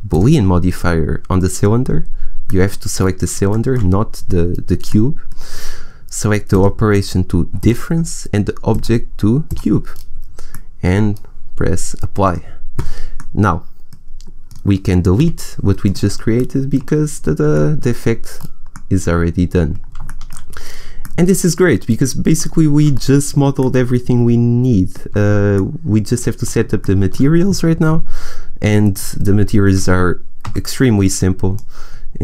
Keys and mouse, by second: 2.4 click, 4.8 middle click, 6.4 click, 8.1-9.9 drag, 9.9 middle click, 12.1 middle click, 13.9 middle click, 15.0 Delete, 18.8 middle click, 22.5 click, 22.7 middle click, 26.4 middle click, 28.5 middle click, 28.7 right click, 29.3-30.3 drag, 30.3 n.